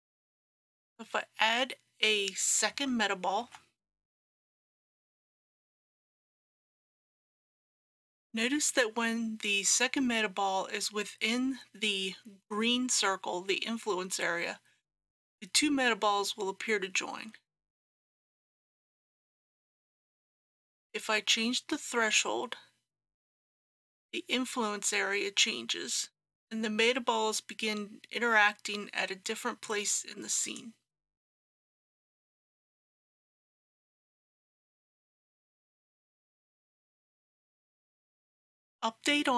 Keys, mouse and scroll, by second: 3.3 shift+a, 4.5 click, 7.0 g, 18.0-30.5 drag, 32.3 g, 37.6-39.3 drag.